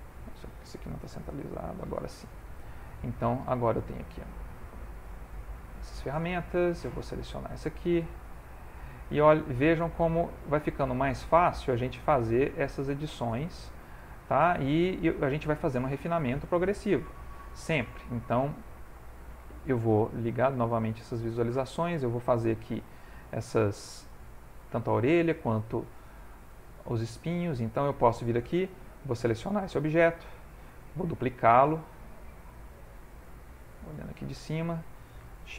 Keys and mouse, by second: 0.0 click, 5.1 shift+middle click, 7.0 alt+click, 8.3 f, 9.4 click, 10.5 click, 12.2 click, 13.8 click, 15.5 ctrl+middle click, 16.0 shift+middle click, 16.5 ctrl+middle click, 17.3 shift+middle click, 18.3 ctrl+middle click, 19.0 shift+middle click, 20.7 click, 21.7 shift+middle click, 24.0 shift+middle click, 26.1 shift+middle click, 27.5 shift+middle click, 27.7 ctrl+middle click, 28.5 ctrl+middle click, 29.2 ctrl+middle click, 29.5 alt+click, 30.2 middle click, 32.2 click, 34.0 click.